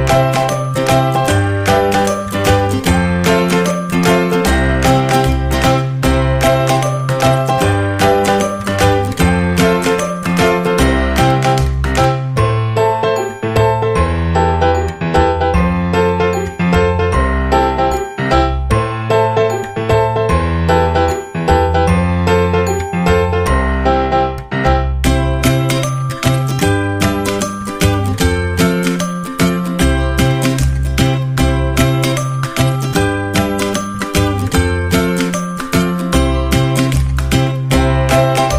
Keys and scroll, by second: 36.8 space.